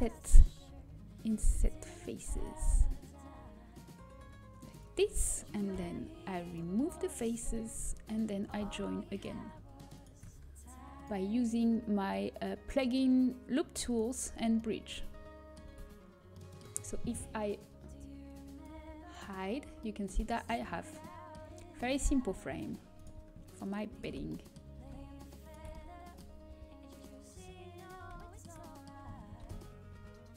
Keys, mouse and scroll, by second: 1.2 click, 2.5-4.4 drag, 5.7 Delete, 6.7-8.7 middle drag, 8.7-16.0 drag, 9.3 right click, 10.0-11.1 middle drag, 11.1 right click, 15.4 middle click, 16.0 a, 18.2-19.4 drag, 19.4-21.7 middle drag, 22.9-27.7 right drag, 27.7-29.6 drag, 29.6 ctrl+b.